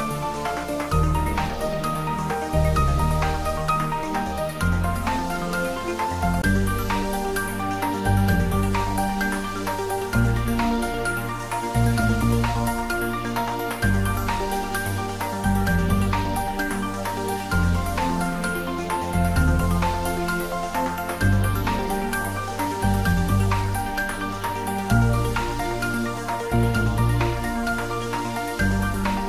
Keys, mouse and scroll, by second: 0.7-1.1 scroll up 1, 2.6 click, 3.5 alt+click, 3.7 alt+click, 7.5 alt+shift+click, 8.6 alt+shift+click, 10.1-10.9 alt+scroll up 2, 10.9-13.6 middle drag, 13.6 click, 15.8 shift+d, 16.1 r, 21.9 click, 22.4-24.2 scroll up 1, 26.3 g, 29.0 click.